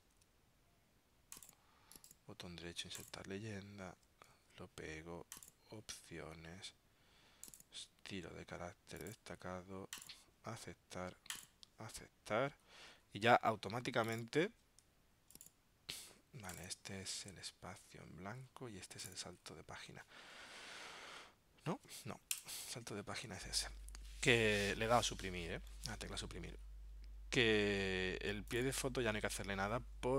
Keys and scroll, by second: 0.1 super+x, 4.5 super+v.